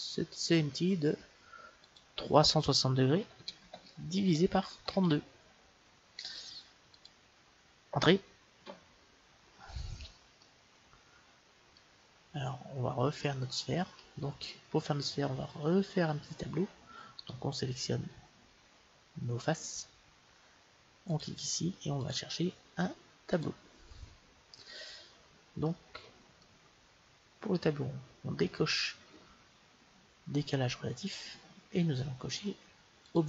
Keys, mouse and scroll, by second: 1.8-3.7 drag, 10.4-12.1 middle drag, 17.2-19.0 right drag, 21.0-23.8 drag, 24.4-25.6 scroll down 1, 25.6-27.6 middle drag, 31.0-33.2 drag.